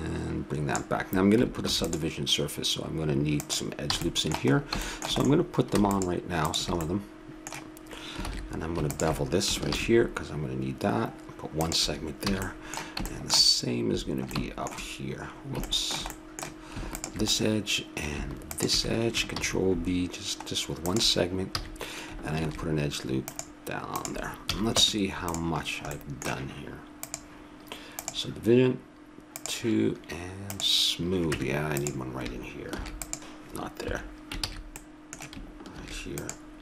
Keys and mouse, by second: 1.7 ctrl+r, 4.0 a, 4.2-5.9 middle drag, 5.9 right click, 6.0-8.3 drag, 8.3 ctrl+z, 9.7 ctrl+b, 12.3 a, 12.4-16.4 middle drag, 17.2-19.4 drag, 19.4 ctrl+b, 21.6 a, 22.4 ctrl+r, 24.5 a, 24.8 Tab, 25.6-27.0 middle drag, 27.0-28.9 drag, 29.4-31.3 drag, 31.3 Tab, 32.7 ctrl+r, 34.4 ctrl+z, 35.8 ctrl+r.